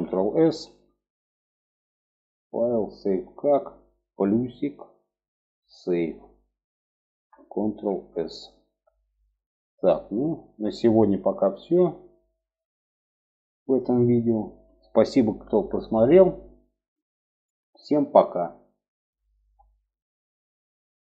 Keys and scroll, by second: 7.0 ctrl+s.